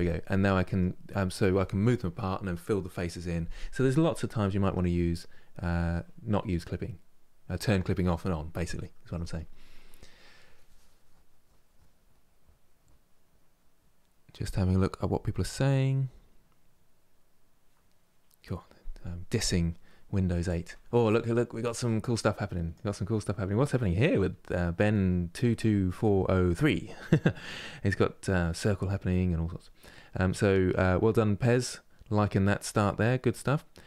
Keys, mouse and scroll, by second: 4.6-7.6 middle drag.